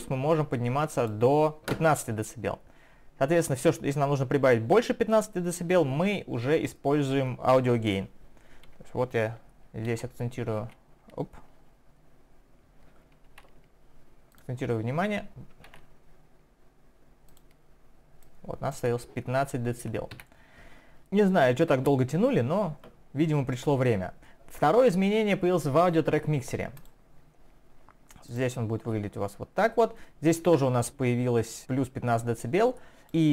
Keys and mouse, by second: 9.9 ctrl+a, 13.3 ctrl+1, 14.3 ctrl+click, 14.4 ctrl+click, 17.3 ctrl+click, 18.2 ctrl+click, 20.1 Escape, 20.3 shift+1, 21.0 click.